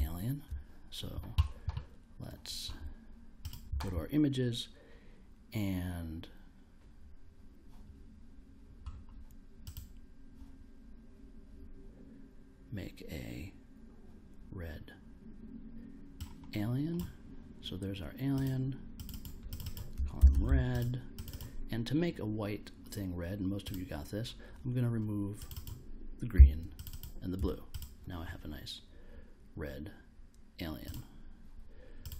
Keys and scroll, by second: 19.9-20.9 typing, 26.3 0.